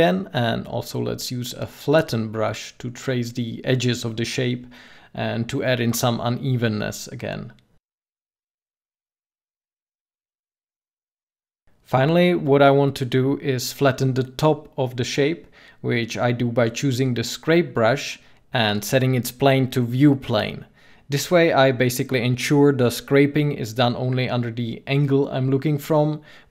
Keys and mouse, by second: 3.3 middle click, 5.1 f, 11.7 middle click, 15.3-19.0 middle drag.